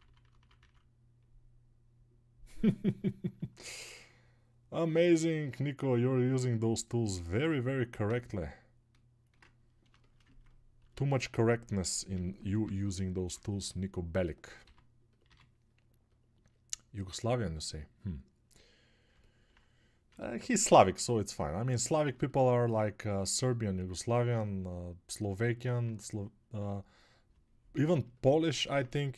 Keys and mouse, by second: 9.4 ctrl+space, 11.7-14.3 right drag, 12.1 g, 13.7 [.